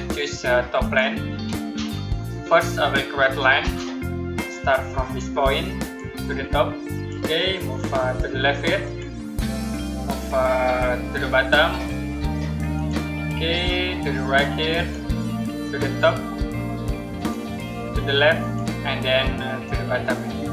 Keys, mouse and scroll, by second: 3.5 click, 15.0 click.